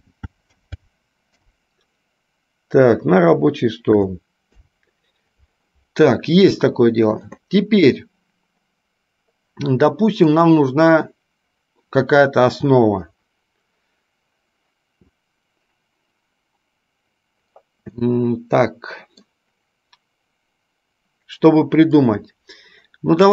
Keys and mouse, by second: 10.4-17.6 drag, 18.1-19.4 middle drag.